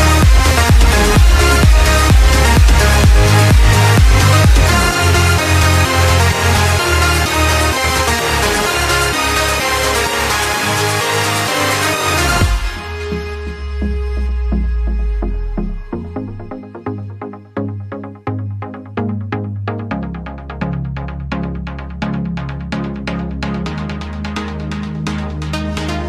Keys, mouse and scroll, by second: 8.1 click, 8.9-10.6 drag, 10.6-11.7 shift+middle drag, 11.7 click, 12.4-13.8 drag, 14.1-14.4 scroll down 1, 14.4-15.7 middle drag, 15.7 click, 16.3 shift+click, 16.9 shift+click, 19.1 ctrl+j, 20.0 click, 21.3 click, 22.4-22.7 scroll down 1, 22.7-26.0 shift+middle drag.